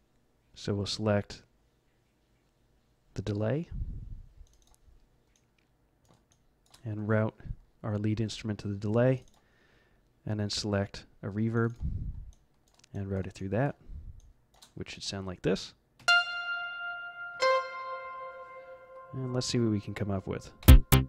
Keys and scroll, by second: 15.9 v, 17.3 z, 20.6 F11.